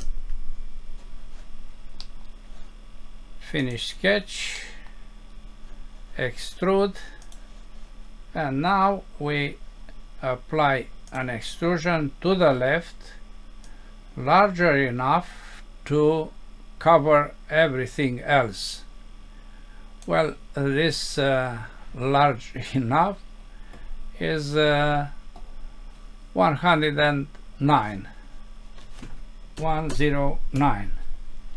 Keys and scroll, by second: 0.0 Return, 2.0 Home, 4.6 F6.